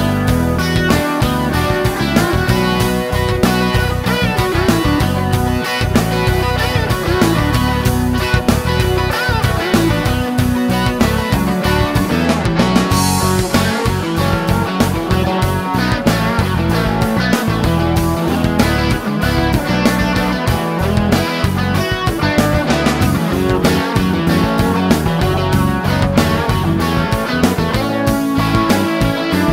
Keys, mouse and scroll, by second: 2.1 click, 5.0-7.0 typing, 9.4-11.6 drag, 13.1 click, 14.1 shift+v, 16.2-17.6 typing, 19.3-23.0 drag, 24.0 click, 26.4-28.5 typing.